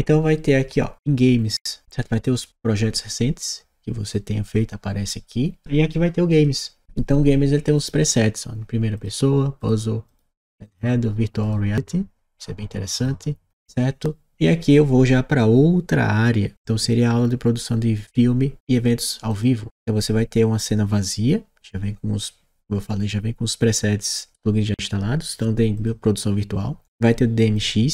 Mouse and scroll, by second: 6.1 click, 7.6 click, 9.9 click, 11.2 click, 12.8 click, 19.2 click, 25.7 click, 27.4 click.